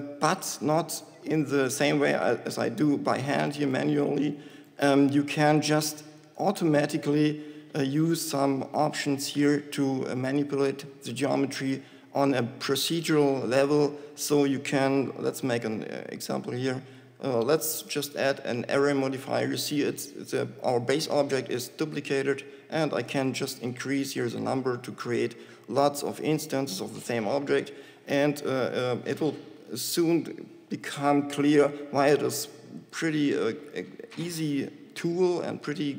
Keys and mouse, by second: 2.8 shift+Tab, 4.5 g, 5.2 Tab, 33.2-35.2 drag.